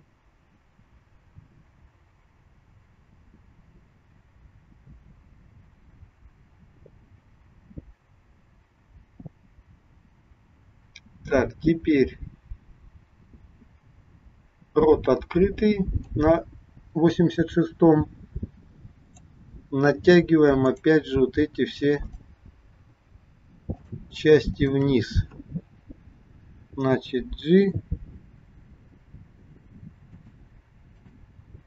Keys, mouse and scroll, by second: 19.0 click, 20.6 click, 22.0 shift+click, 22.6 shift+click, 23.7 shift+click, 27.0 g, 31.0 click.